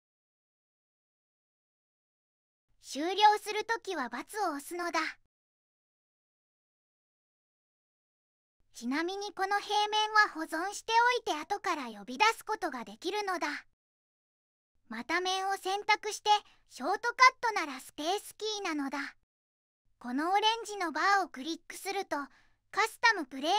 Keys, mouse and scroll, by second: 9.3 click, 9.6 click, 10.1 right click, 13.0 3.